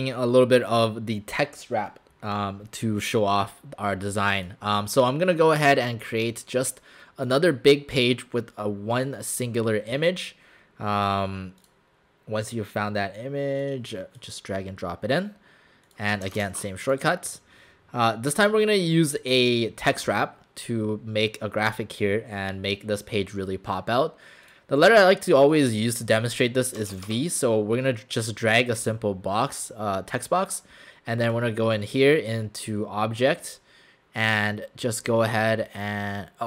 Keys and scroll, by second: 26.8 Caps_Lock, 26.9 v, 27.1 Caps_Lock.